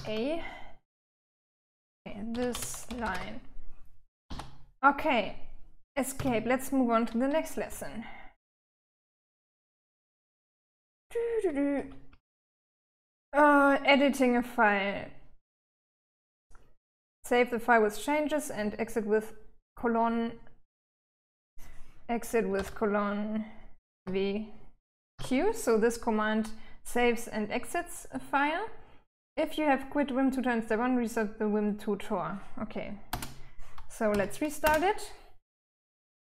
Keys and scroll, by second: 1.8-3.7 typing, 5.6 Escape, 7.1-8.0 j, 8.7 j, 9.8-11.0 j, 11.1 j, 11.5 j, 11.9 j, 21.9 typing, 23.4 typing, 24.5 typing, 32.5 Return, 33.5 Up, 34.0 Return, 35.8-36.3 typing.